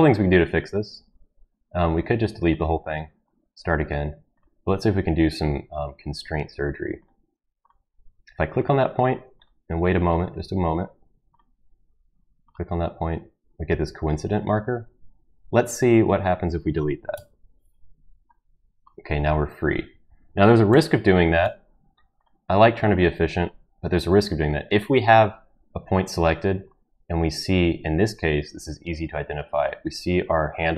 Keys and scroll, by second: 17.1 Delete, 20.7 ctrl+z, 21.4 ctrl+z.